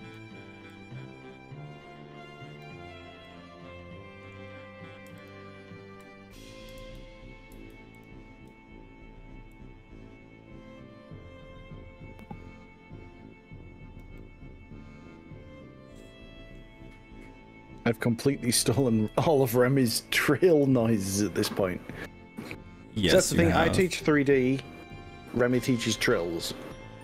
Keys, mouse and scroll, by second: 0.8 click, 3.3-4.3 middle drag, 5.2 click, 6.8 ctrl+z, 7.6 ctrl+z, 8.0 ctrl+click, 9.6 click, 14.2-16.6 middle drag, 17.2 scroll up 2, 17.7-18.0 scroll down 3, 18.8 click, 19.2 z, 20.6 z, 23.2 z, 24.3 scroll up 2, 25.0 middle click, 25.7 shift+middle click, 26.8 scroll up 2.